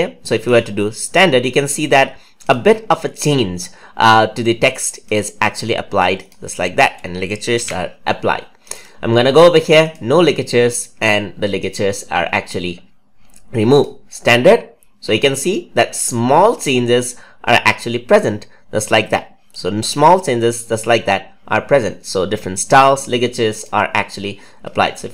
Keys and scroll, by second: 7.5 ctrl+a.